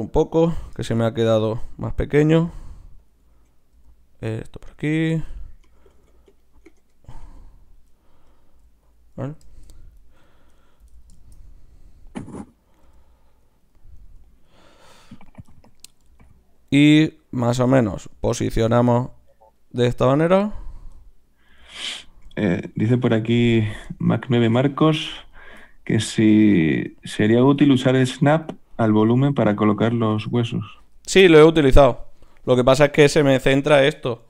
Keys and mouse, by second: 0.4 z, 2.3 g, 3.7 g, 5.1 z, 5.7-8.6 right drag, 5.9 g, 7.2 g, 8.6 g, 9.8 click, 10.3-11.9 drag, 10.8 z, 12.8 g, 14.1 g, 16.1 g, 18.1 z, 19.0 g, 20.3 g, 21.5 g, 22.3 z, 23.1 z, 25.3-27.1 drag, 27.5 g, 29.0 g, 30.0 g, 33.3-34.2 drag.